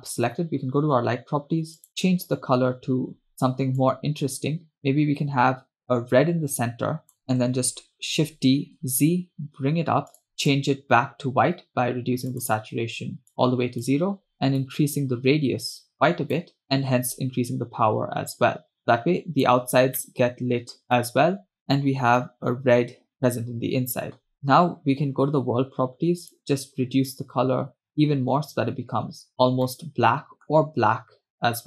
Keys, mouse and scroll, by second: 1.9 click, 8.3 shift+d, 10.7 click, 12.4 drag, 14.7-19.8 drag, 20.3 middle click, 21.1-21.6 middle drag, 22.0-22.5 scroll up 1, 23.3 scroll down 1, 24.3 click, 26.3 click, 29.8-30.8 middle drag.